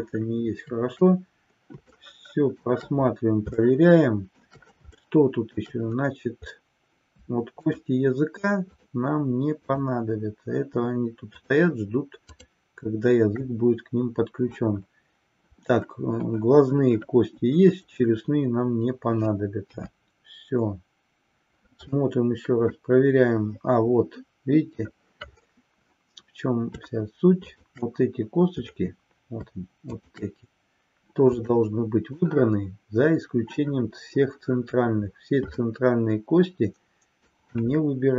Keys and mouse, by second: 1.9-2.7 shift+middle drag, 3.6-4.6 shift+middle drag, 5.0-5.6 shift+middle drag, 7.5-8.3 shift+drag, 8.7-9.3 shift+drag, 9.7 shift+click, 12.4-13.3 shift+drag, 19.7 KP_3, 22.7-24.9 middle drag, 29.9 shift+click, 31.5 middle click, 35.7-37.4 shift+middle drag.